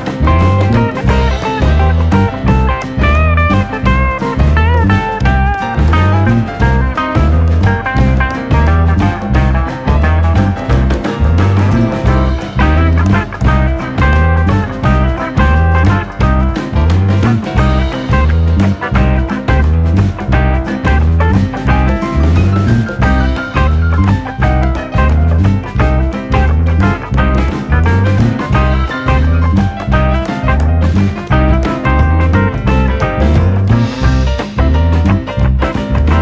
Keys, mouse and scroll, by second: 1.3 KP_7, 2.0 shift+middle click, 2.7 KP_7, 3.4 r, 4.7 click, 5.7 r, 6.8 click, 7.2 scroll down 3, 7.3-8.3 middle drag, 8.3 click, 8.5 middle click, 8.9 click, 9.3 click, 9.8 click, 10.0 l, 10.3 KP_7, 10.6 scroll up 1, 10.8 shift+middle click, 11.5 shift+d, 12.8 r, 15.2 g, 19.1-20.1 drag, 20.3 scroll down 3, 20.5-21.5 middle drag, 21.6 click, 21.8 scroll up 3, 21.9 middle click, 22.3 scroll up 1, 22.5 middle click, 23.1 click, 23.9 l, 24.1 Return, 24.4 KP_7, 24.6 scroll down 1, 24.9 shift+middle click, 25.1 scroll up 2, 25.3 click, 26.5 r, 27.5 click, 28.9 scroll down 2, 29.2 KP_1, 29.6-30.1 scroll up 2, 30.1 click, 31.7 click, 31.8 scroll down 1, 32.0 middle click, 32.7 scroll up 3, 32.8-33.8 middle drag, 34.0 click, 34.3 l, 34.6 KP_7, 34.9-35.4 scroll up 1, 35.4 r.